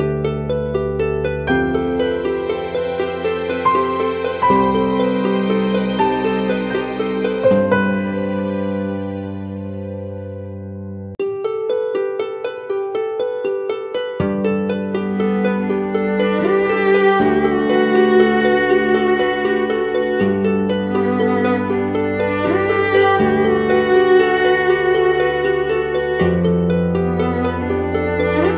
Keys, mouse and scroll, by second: 1.0 alt+click, 8.4-9.7 typing, 13.9-14.5 scroll down 1, 17.7-18.7 typing, 20.7-21.0 typing, 22.7-23.5 typing.